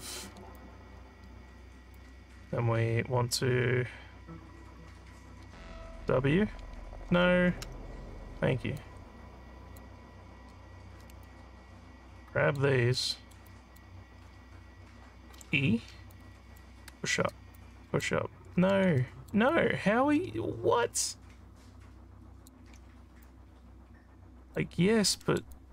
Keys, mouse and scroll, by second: 0.6-2.0 alt+drag, 6.0 w, 7.7 w, 8.8 click, 11.3-12.6 alt+drag, 13.0 alt+middle click, 13.5 alt+click, 15.4 e, 16.1 click, 17.6 click, 19.0 alt+middle click, 19.5-22.5 alt+drag, 23.3-24.6 drag, 25.2 alt+middle click, 25.6-25.7 alt+drag.